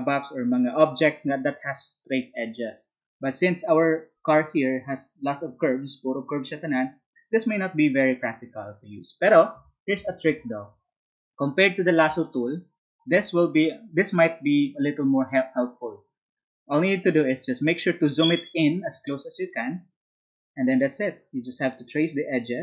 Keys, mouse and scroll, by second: 18.7 space.